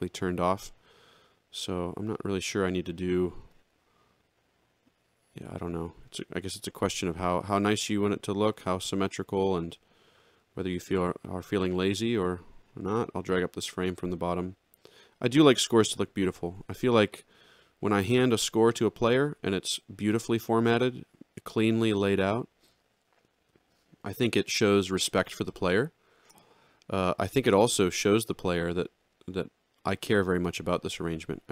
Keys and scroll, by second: 8.5 shift+s, 10.4 shift+s, 16.7 ctrl+-, 31.0 ctrl+=.